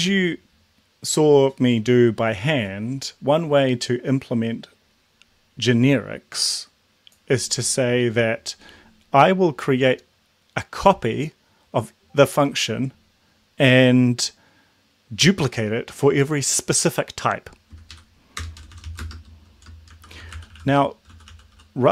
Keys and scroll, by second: 17.9 Up, 18.3 Return, 18.6-21.9 typing.